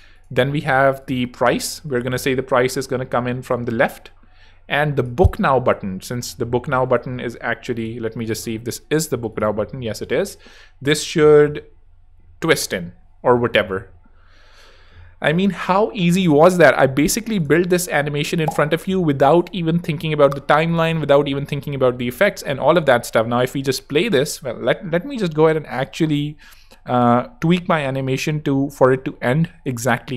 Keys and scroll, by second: 17.9 super+-, 19.0 super+=.